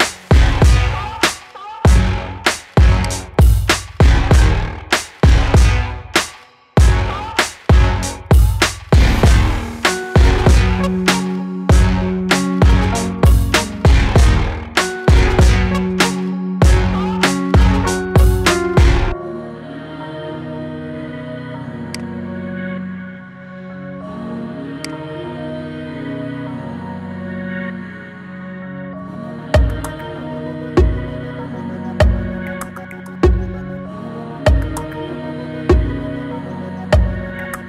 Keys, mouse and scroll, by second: 0.3-0.8 shift+middle drag, 0.8-1.3 scroll up 2, 1.3-2.9 shift+middle drag, 2.9-13.1 drag, 17.9-18.3 scroll down 4, 18.3-18.8 shift+middle drag, 18.8-19.2 scroll down 1, 19.2-20.1 shift+middle drag, 20.1-20.6 scroll down 3, 20.6 scroll down 1, 20.7-21.8 scroll up 1, 21.8 click, 24.8-27.9 drag, 32.6 scroll down 2, 33.1 scroll down 1.